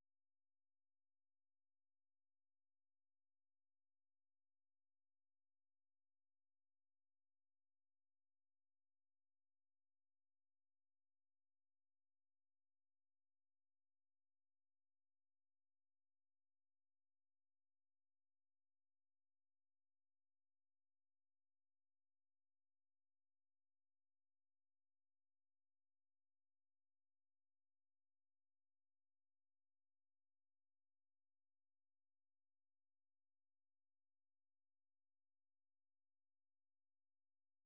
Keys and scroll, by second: 4.9 Return, 7.3 Up, 7.5 Up, 8.4 Return, 18.3 super+2, 37.1 ctrl+c.